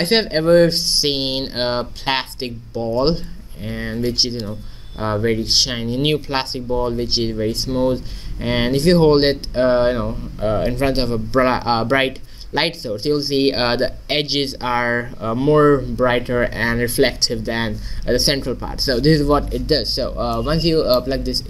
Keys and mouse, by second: 20.4-21.4 middle drag.